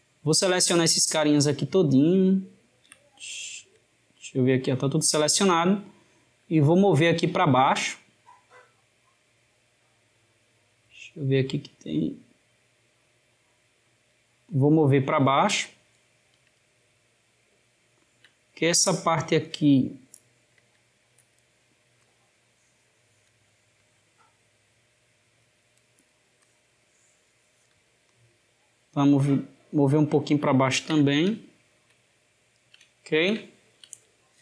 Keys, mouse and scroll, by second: 6.2 click, 16.9-19.2 ctrl+middle drag, 19.2 click, 21.7 click, 26.2 click, 28.9 click, 31.2-34.4 ctrl+middle drag.